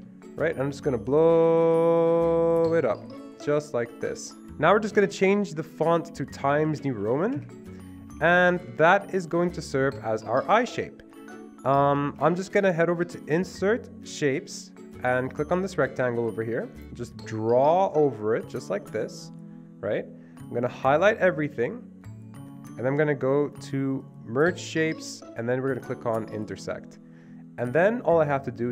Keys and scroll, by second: 0.0 Escape, 4.4 Escape, 4.9 Escape, 6.4-7.7 typing, 8.0 Escape, 8.2 Escape, 8.4 Escape, 10.6 typing, 12.0 typing, 12.0 Escape, 12.2 Escape.